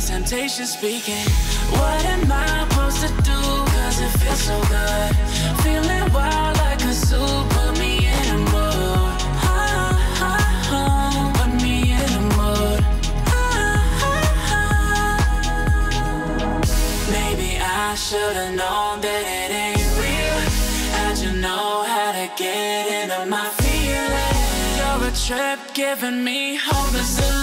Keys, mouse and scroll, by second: 2.0 ctrl+z, 3.0-7.1 drag, 16.5 click, 19.2-20.0 click, 24.4 ctrl+Num_Lock, 24.4 ctrl+click, 26.9-27.4 ctrl+drag.